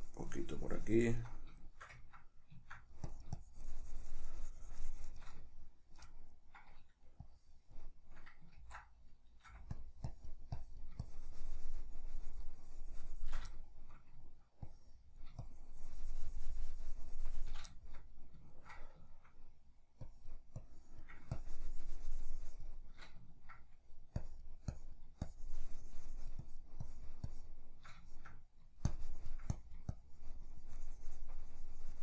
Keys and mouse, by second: 1.4-3.1 shift+middle drag, 3.1-5.4 shift+drag, 5.4-7.2 shift+middle drag, 7.2-9.8 drag, 8.8 ctrl+z, 9.5 f, 10.1-13.6 drag, 13.6-14.7 shift+middle drag, 14.7-17.8 drag, 17.8-20.1 shift+middle drag, 20.1-23.3 drag, 23.3 ctrl+middle click, 24.3-28.1 drag, 28.1 shift+middle click, 28.9-32.0 shift+drag.